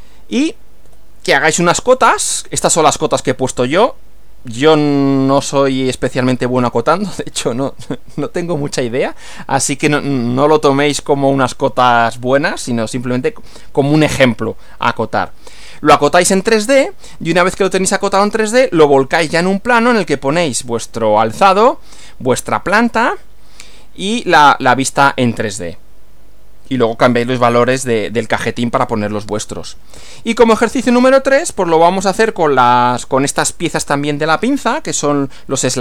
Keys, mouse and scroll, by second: 0.8 Right, 17.0 Right, 30.0 Right.